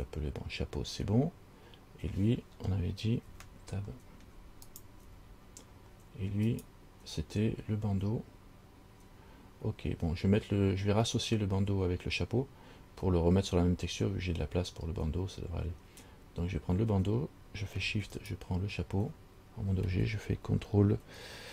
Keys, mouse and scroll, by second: 5.2 Tab, 5.8-6.7 scroll up 1, 6.7 right click, 18.3 shift+right click.